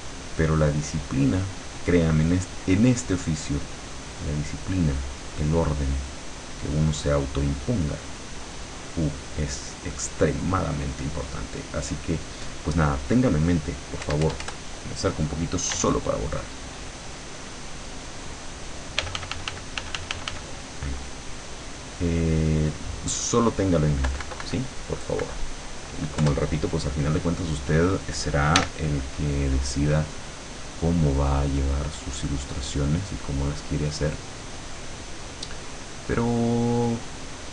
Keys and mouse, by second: 1.8-3.6 drag, 4.0 click, 6.3-11.4 drag, 14.1 KP_Add, 15.8 e, 16.5-18.2 drag, 19.0 f, 21.6-23.2 drag, 24.1 KP_Subtract, 25.2 KP_Subtract, 26.2 KP_Add, 28.6 e, 30.6-34.2 drag, 34.4-36.4 drag.